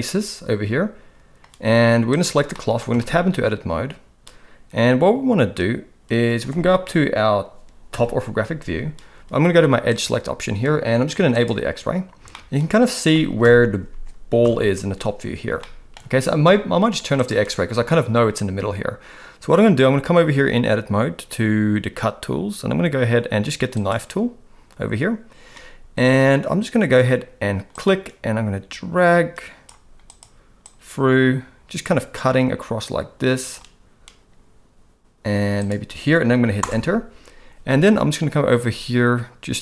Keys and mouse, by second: 2.1 click, 2.5 middle click, 2.9 Tab, 7.9 KP_7, 9.9 click, 11.3 click, 12.3 middle click, 13.4 KP_1, 14.4 KP_7, 15.6 shift+middle click, 23.7 click, 27.7-36.6 drag.